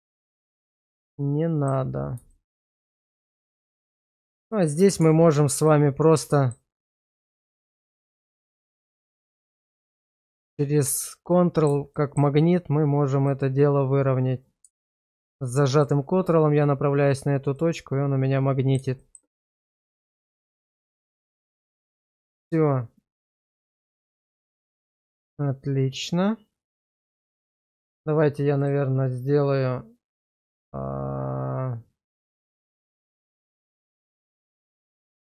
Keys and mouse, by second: 0.2 shift+middle click, 0.7-1.7 middle drag, 2.3 shift+middle click, 2.9 middle click, 3.7 middle click, 4.5 middle click, 5.0 Tab, 6.3 middle click, 8.7 click, 11.3 middle click, 11.9 shift+middle click, 14.5 click, 17.5-18.8 middle drag, 19.0 shift+middle click, 19.4 Tab, 19.9 middle click, 20.9 shift+middle drag, 21.4 middle drag, 23.2 click, 24.6 shift+middle click, 25.1-27.6 middle drag, 28.6-35.2 drag.